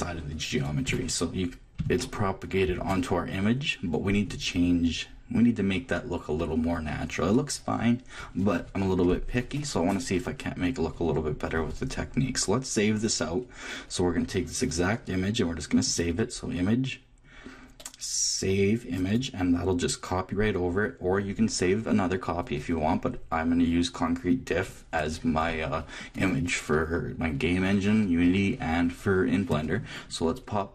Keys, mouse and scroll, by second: 0.9 a, 1.8-5.2 shift+middle drag, 16.1-17.8 drag.